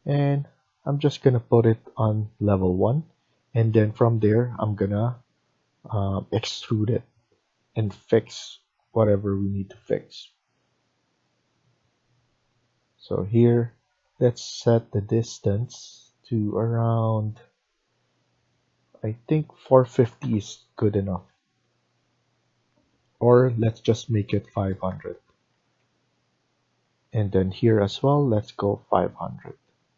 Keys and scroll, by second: 13.8 Escape, 14.1 Escape, 19.2-20.4 typing, 24.1-24.8 typing, 25.0 Return, 25.4 Escape.